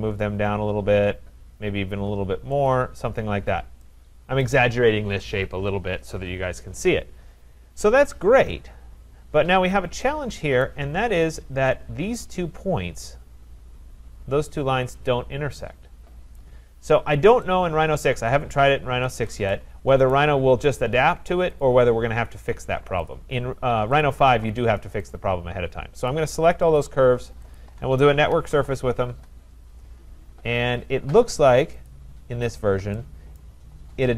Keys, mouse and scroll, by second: 2.7 click, 3.3-3.7 scroll, 4.4 right click, 7.7-8.4 scroll, 10.6 right click, 10.9-11.5 scroll, 11.5-12.2 scroll, 16.4 right click, 16.6-17.4 scroll, 17.4 scroll, 18.0 right click, 18.4-19.1 scroll, 18.9 Escape, 19.1 Escape, 20.1 right click, 21.6 shift+click, 23.1 shift+click, 24.0 shift+click, 25.2 shift+click, 26.1 shift+click, 26.8 shift+click, 27.6 shift+click, 28.1-29.1 typing, 31.9 click, 32.4-32.8 scroll, 33.8 right click, 33.8-34.1 scroll.